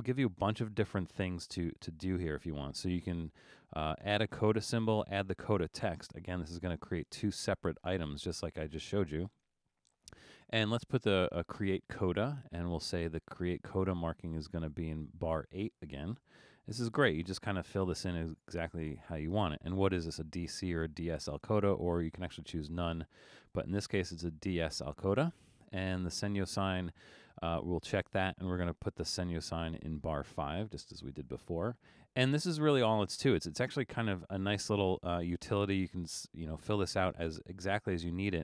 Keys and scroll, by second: 16.2 8, 30.8 5.